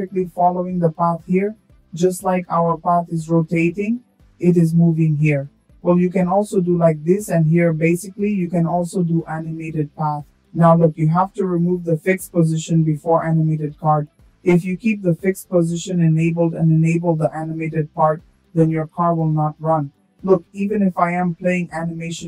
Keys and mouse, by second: 1.1 click, 2.8 click, 4.7 shift+drag, 10.6 click, 16.8 space, 18.7 space, 21.2 click.